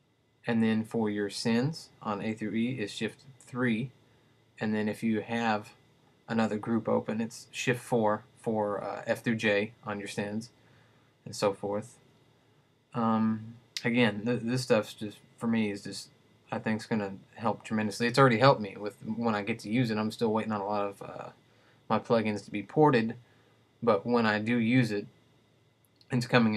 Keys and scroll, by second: 3.7 shift+3, 7.8 shift+4.